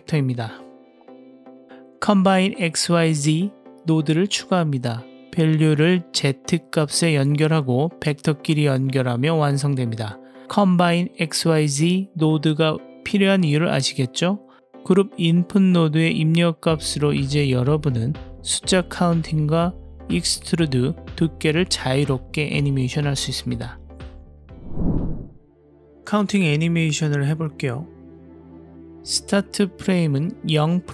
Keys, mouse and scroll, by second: 0.9 middle click, 1.8 click, 2.3 shift+a, 7.1 click, 9.5-10.2 drag, 11.1-13.9 middle drag, 15.5-18.7 drag, 19.1 click, 22.4-24.1 drag, 29.9 click.